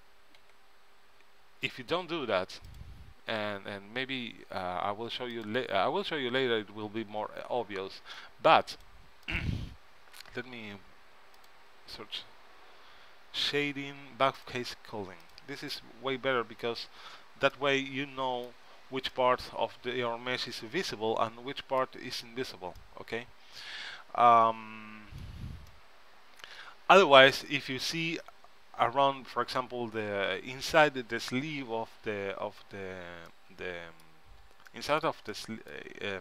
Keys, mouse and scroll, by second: 0.6 n, 2.8-4.6 drag, 5.5-7.3 drag, 8.9-11.2 drag, 11.5-13.3 drag, 14.5-15.9 drag, 15.9-19.0 middle drag, 23.0 middle click, 33.9-36.2 middle drag.